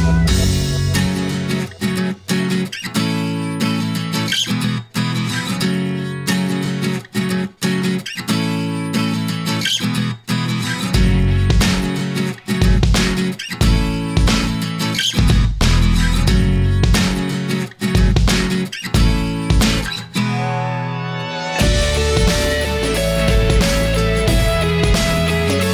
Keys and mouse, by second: 0.1 middle click, 1.9 click, 2.4 click, 3.2 middle click, 4.9-6.6 middle drag, 8.3-10.3 middle drag, 13.0 middle click, 13.1 right click, 16.5 shift+middle click, 17.7 shift+middle click, 19.4 shift+middle click, 20.2-21.5 shift+middle drag, 21.8 shift+d, 24.0 middle click, 24.5 right click.